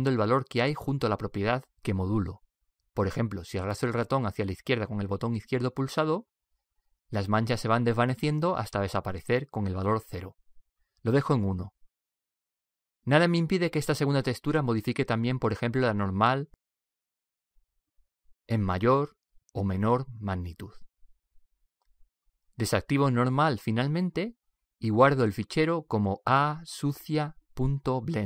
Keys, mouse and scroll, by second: 3.5 click, 17.4 click, 20.0-22.0 drag, 24.6 click, 27.3 click.